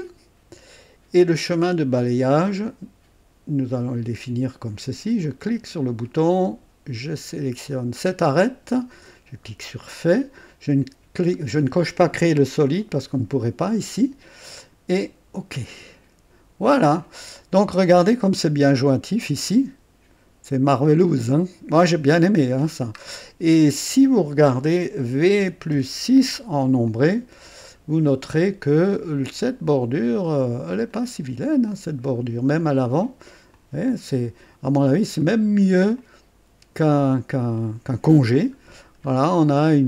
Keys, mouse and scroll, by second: 1.5 right click, 5.2 click, 7.7 click, 9.8 click, 14.6 click, 17.0-18.5 drag, 18.7-19.1 scroll up 1, 19.3-22.8 drag, 23.0-23.3 scroll down 2, 25.4 v, 25.7 KP_6, 26.9-31.6 drag, 31.0 right click, 31.7 click, 32.6 right click, 33.5-35.2 drag, 35.2 right click, 36.0 click, 37.1 right click, 38.5 scroll up 1, 39.3-39.7 scroll down 1.